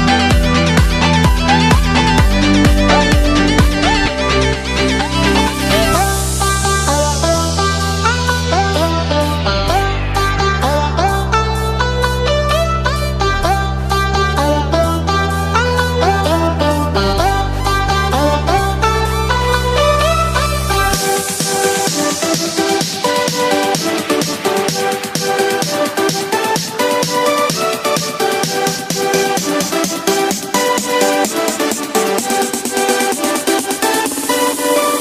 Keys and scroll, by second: 3.7 space, 7.5 space, 8.4 ctrl+z, 9.6 space, 13.1 ctrl+z, 14.8 ctrl+-, 15.1 ctrl+=, 16.5 ctrl+-, 17.0 ctrl+=, 18.0 ctrl+z, 24.3 space, 30.3 space, 34.8 ctrl+-.